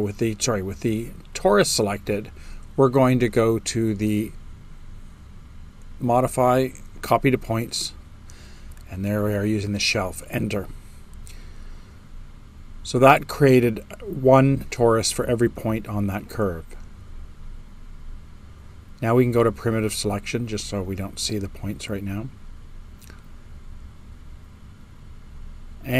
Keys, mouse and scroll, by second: 8.2 Return, 20.5-21.6 drag, 20.5 space.